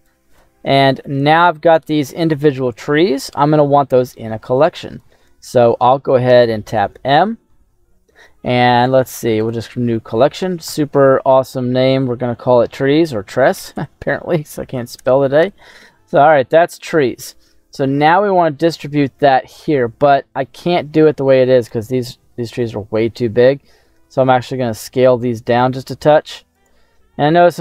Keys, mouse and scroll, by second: 0.0 middle click, 0.0 n, 0.6 middle click, 1.5-1.8 scroll up 2, 1.8-2.5 scroll down 1, 2.5 middle click, 3.4 scroll down 1, 4.1 click, 6.3 m, 11.6 s, 13.7 BackSpace, 16.8-17.8 middle drag, 18.4 middle click, 20.0 middle click, 20.9 scroll up 1, 21.6 right click, 22.3 s, 26.5 click, 27.1 ctrl+a.